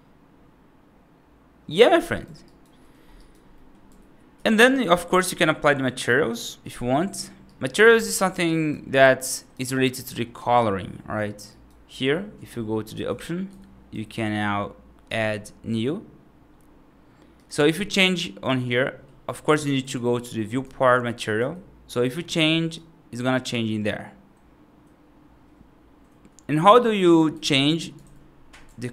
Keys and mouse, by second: 2.0 right drag, 2.4 right drag, 3.1 right drag, 3.4 middle click, 3.7 F2, 4.2 F3, 4.5 right click, 7.3 right click, 8.4 right click, 8.9 middle click, 9.2 right click, 10.0 middle click, 10.2 right click, 11.4 right click, 13.8 F2, 15.0 click, 26.9 right click.